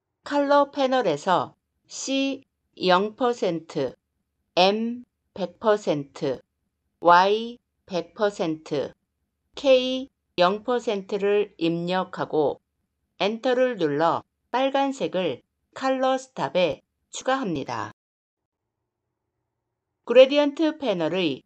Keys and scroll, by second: 13.0 Return.